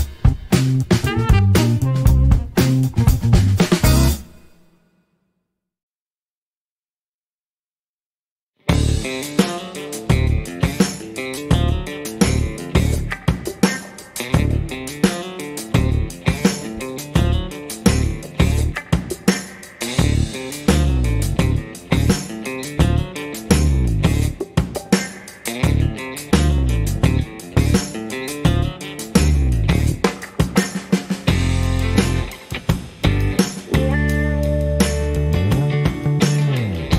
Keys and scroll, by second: 3.2 KP_Decimal, 3.4 KP_3, 3.5 Return, 8.5 ., 8.7 KP_3, 8.9 Return, 10.5 KP_2, 14.1 KP_2, 31.4 Escape, 31.9 shift+a.